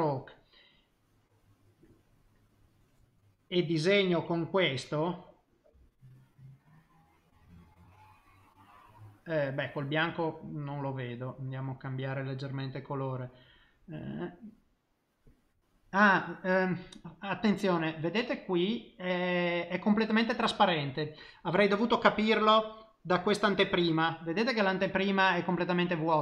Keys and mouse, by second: 0.8 middle click, 5.0 click, 7.8 middle click, 10.1 click, 25.2 click.